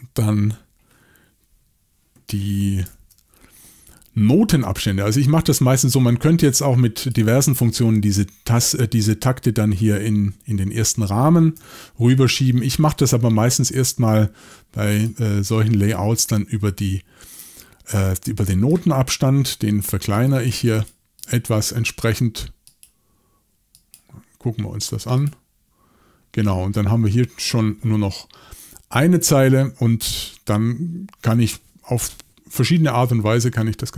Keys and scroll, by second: 2.9 shift+super+l, 11.6 shift+super+l.